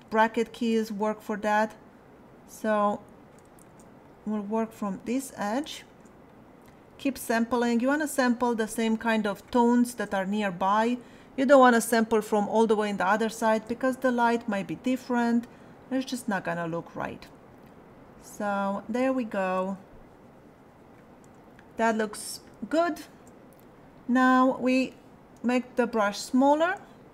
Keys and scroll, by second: 25.3 [.